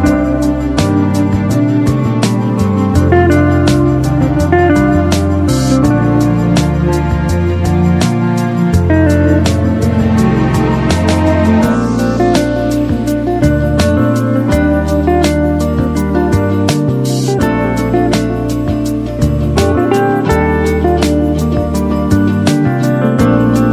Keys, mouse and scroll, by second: 1.2 alt+click, 2.4 space, 2.5-3.4 click, 2.9 space, 4.9-6.4 drag, 8.3-9.8 typing, 8.5 click, 11.1 click, 13.7 right click, 13.7 right click, 15.6-18.1 drag, 20.9-23.7 typing, 21.1 click, 21.2 click, 23.2-23.7 click.